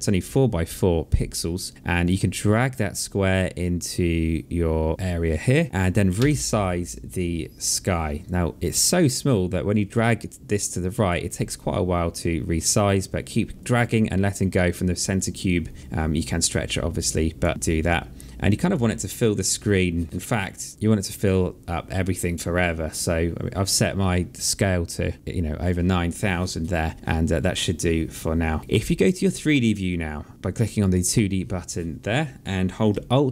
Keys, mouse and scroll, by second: 2.3 click, 5.9 r, 8.0 click, 9.5 click, 11.1 click, 13.5 click, 14.9 click, 16.0 click, 17.5 click, 21.6 click, 30.4 click, 33.1 alt+click.